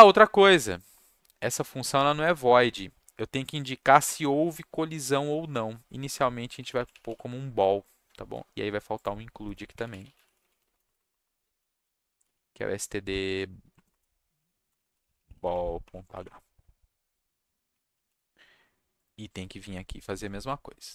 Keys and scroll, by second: 6.3-7.5 typing, 9.4 shift+Return, 9.5-16.6 typing, 18.0 ctrl+c.